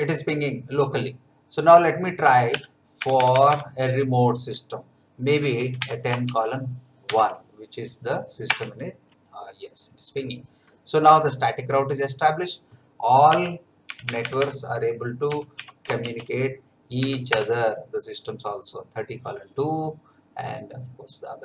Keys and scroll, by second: 2.5 Up, 3.0 BackSpace, 5.3-7.1 typing, 8.5 Return, 13.3 Up, 13.9 BackSpace, 15.1-16.9 typing, 17.3 Return.